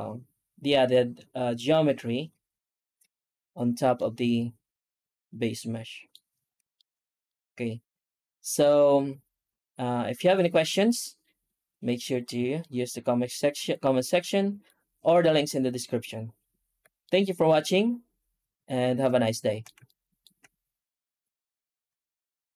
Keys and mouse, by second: 3.8-6.0 middle drag, 6.6 shift+middle click, 7.1-12.1 middle drag, 12.4-14.5 shift+middle drag, 16.9-18.9 middle drag, 19.1-19.5 shift+middle drag, 19.7 ctrl+middle click.